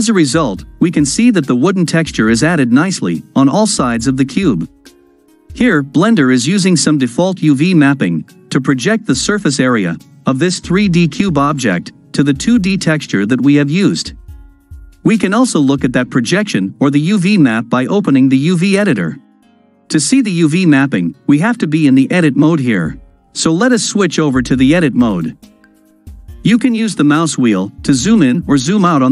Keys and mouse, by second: 1.2-4.4 drag, 4.4-5.7 middle drag, 8.6-9.3 middle drag, 9.3 click, 14.3-14.9 drag, 14.9-16.1 middle drag, 17.6-18.7 drag, 23.7-24.9 drag.